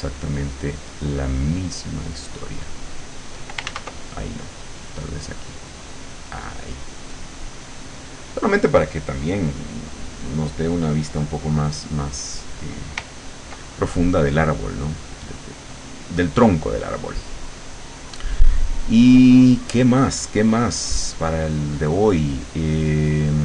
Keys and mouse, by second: 2.7 click, 3.7 ctrl+z, 4.6 click, 5.5 click, 6.7 click, 7.2 click, 7.7 click, 9.4 click, 9.8 click, 10.3 click, 10.7 click.